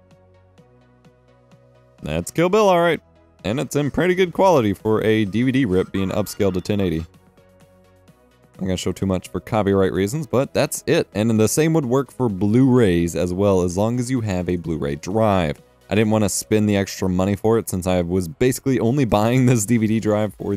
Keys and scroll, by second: 8.0 space.